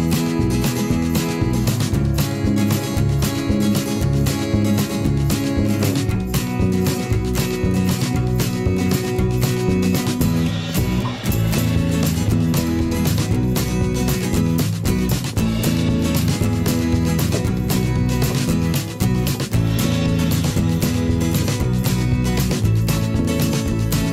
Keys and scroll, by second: 8.2 ctrl+c, 8.9 ctrl+v.